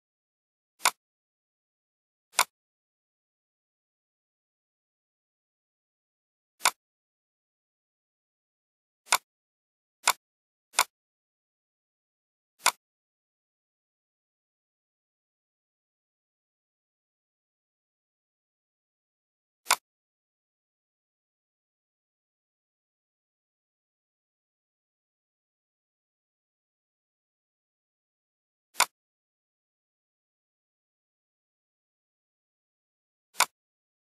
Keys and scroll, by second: 15.5 ctrl+c, 17.1 ctrl+f.